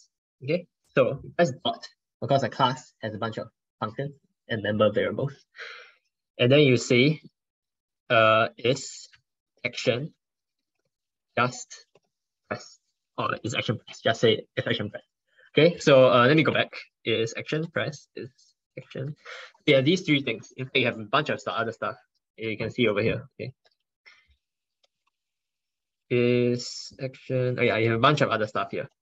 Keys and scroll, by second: 16.4 ctrl+BackSpace, 16.6 ctrl+BackSpace.